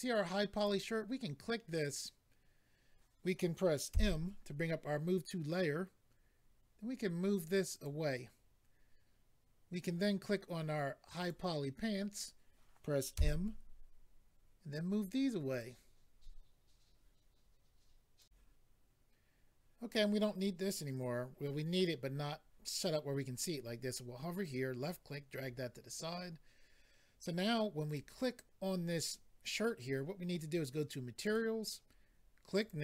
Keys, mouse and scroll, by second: 0.5 click, 7.7 click, 11.1 click, 15.5 click, 18.2 click, 18.2 click, 24.4 click, 26.0-26.6 scroll down 3, 27.8 click, 27.9 click, 31.2 click, 31.3 click, 32.6 click, 32.7 click.